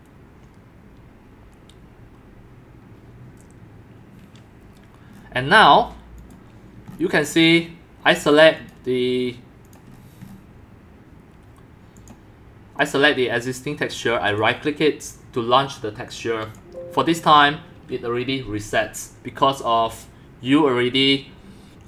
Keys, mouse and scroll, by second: 5.1-6.4 scroll down 9, 6.4 click, 7.0 scroll, 7.4 click, 7.6 click, 8.2-9.9 drag, 9.9-11.9 scroll down 10, 11.9 scroll up 10, 12.1-14.4 drag, 14.4 right click, 15.2-21.8 drag.